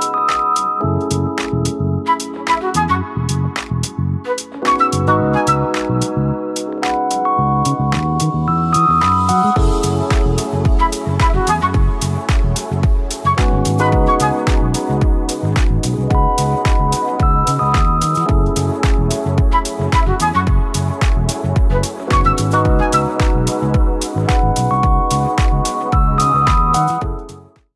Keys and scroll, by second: 7.3-8.1 space, 11.9 Up.